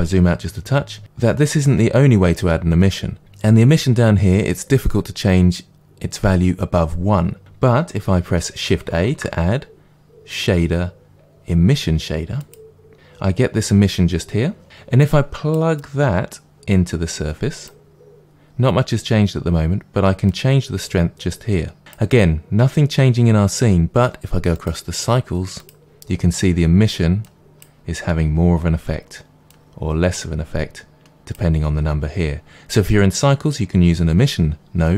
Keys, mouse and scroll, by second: 9.0 shift+a, 12.9-15.4 drag, 15.7 click, 20.2-34.9 drag.